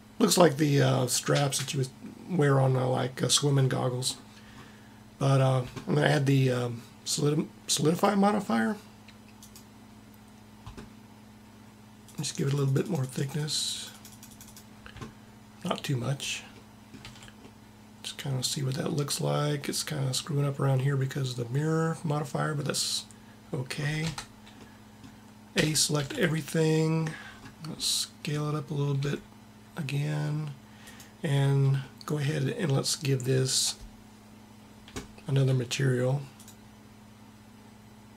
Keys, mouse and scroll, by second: 2.0-3.7 middle drag, 7.0 middle click, 7.9-9.8 drag, 12.3-16.3 drag, 16.3 middle click, 17.0 a, 24.0 Tab, 25.5 a, 26.0 a, 29.0 s.